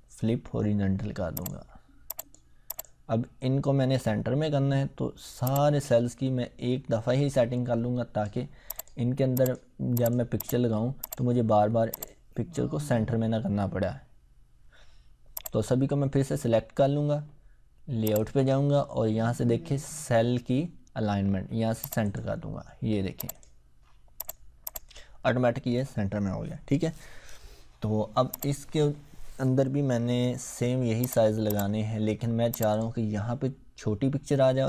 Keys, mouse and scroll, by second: 1.3 click, 5.4-8.2 drag, 15.3 click, 15.4-17.0 drag, 21.8 click, 28.4 click.